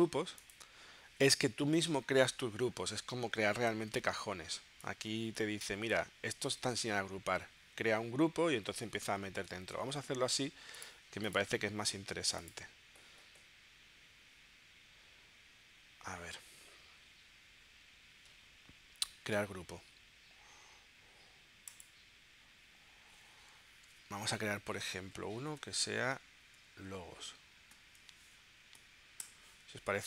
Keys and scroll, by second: 25.5 shift+l, 25.8 o, 29.3 Return.